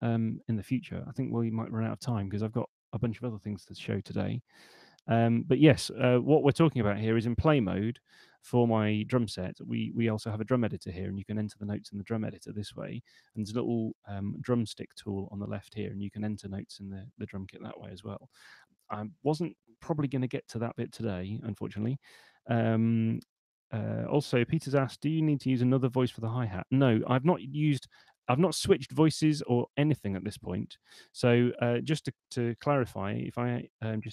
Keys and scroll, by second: 18.1 super+2, 33.0-34.1 typing.